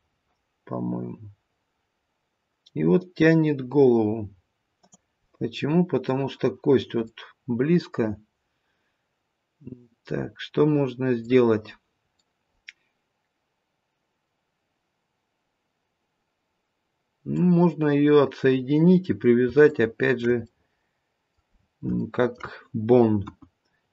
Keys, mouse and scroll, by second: 5.2 middle click, 7.0 middle click, 11.6-12.2 scroll up 1, 12.2 middle click, 17.7-18.2 scroll up 1, 18.4-18.9 scroll up 2, 18.9-19.4 scroll down 2, 19.7 shift+middle click, 20.2 shift+middle click, 20.4 middle click, 21.4-21.9 scroll down 2, 21.9 shift+middle click, 23.1 KP_1, 23.8-23.9 scroll up 1.